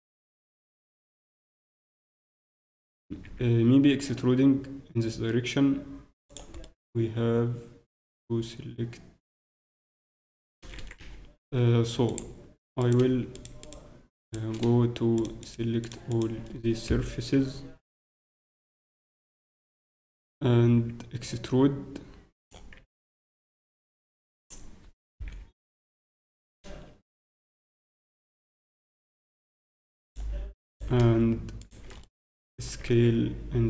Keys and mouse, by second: 2.1 e, 6.6-8.4 middle drag, 10.6 ctrl+a, 10.9 ctrl+a, 11.0 w, 12.8-14.3 ctrl+drag, 14.3-17.8 right drag, 17.3 z, 18.5 z, 19.6 e, 22.7 z, 22.9-24.7 drag, 25.4 z, 26.5 z, 26.6 a, 27.5 z, 30.0-31.9 drag, 30.7-33.3 right drag, 33.1 s, 33.3 click.